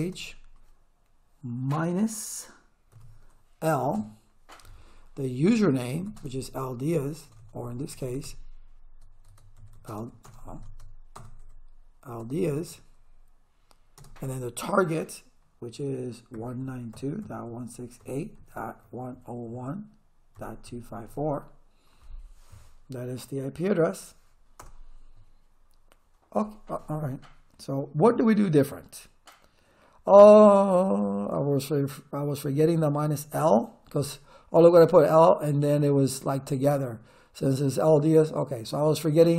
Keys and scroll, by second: 0.0 space, 2.9 -, 3.9 l, 5.5-7.3 typing, 8.0 Caps_Lock, 9.3-14.0 typing, 10.7 Caps_Lock, 16.1-21.6 typing, 24.6 Return.